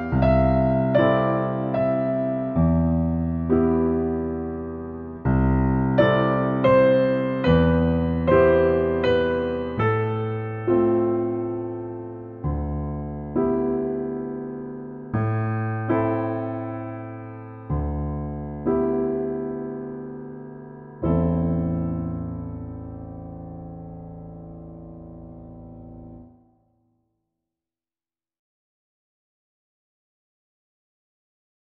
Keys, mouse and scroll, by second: 0.4 middle click, 3.5 click, 4.5 click, 5.3 click, 5.9 click, 8.5 typing, 9.6 Return, 11.4 middle click, 12.2 scroll up 1, 14.5 m, 15.6 click, 16.9 click, 17.5 space, 17.8-18.5 scroll down 1, 18.5 middle click, 19.4-19.9 scroll down 1, 20.5 middle click, 21.7-22.7 scroll down 1, 22.7 click, 23.3-23.8 scroll up 1, 23.8 middle click, 24.9-25.4 scroll down 1, 25.4-26.6 scroll up 1, 28.0 click, 28.9 click, 30.8 click.